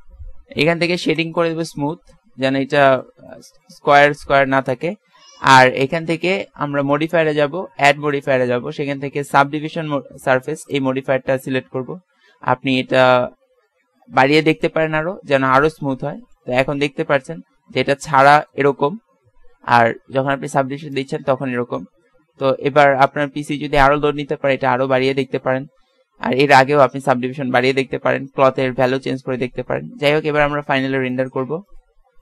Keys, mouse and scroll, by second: 0.1-1.2 middle drag, 5.4-6.8 middle drag, 10.0 middle click, 11.5-16.3 middle drag, 20.0 middle click, 22.0 middle click, 25.0 ctrl+s.